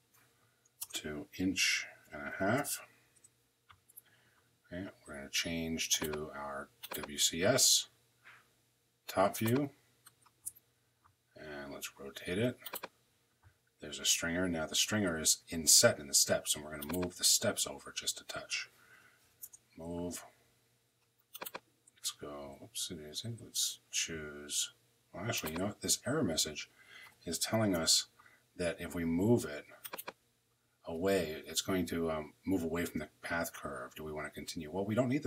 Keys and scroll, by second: 0.5 Return, 1.5-2.8 typing, 2.9 Return, 18.9 m, 19.1 Return, 23.0 Escape, 27.3 m, 27.5 Return.